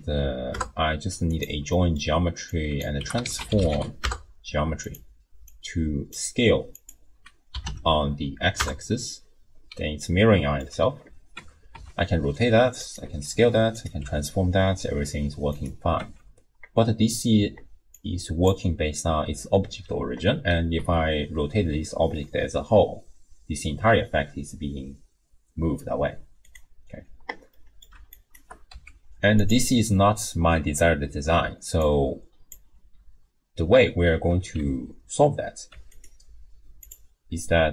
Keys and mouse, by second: 1.7 click, 2.5-4.9 drag, 5.5-6.2 drag, 6.7-8.6 drag, 10.2 middle click, 11.3 Tab, 11.7 r, 13.0 s, 14.0 g, 16.0 Tab, 17.9 click, 20.8 r, 27.5 middle click, 28.2 shift+click, 28.7 g, 31.8 click, 34.6 Tab, 35.7 Tab, 36.0-37.0 drag.